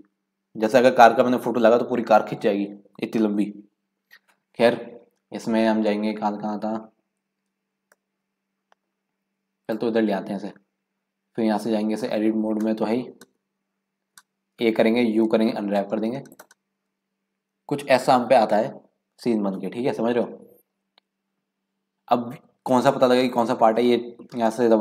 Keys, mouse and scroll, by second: 8.0 middle click, 8.8-9.2 scroll down 1, 9.6 click, 14.5 a, 15.3 u, 19.8 scroll down 1, 19.9-20.3 scroll up 5, 20.3 scroll down 1, 20.6 scroll up 1, 20.7-21.3 scroll down 1, 23.2 click.